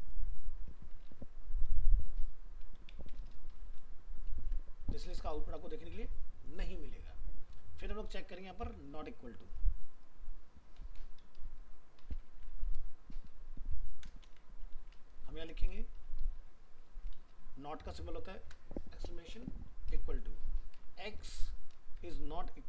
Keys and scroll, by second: 4.1 ctrl+s, 12.3 ctrl+c, 14.2 ctrl+v.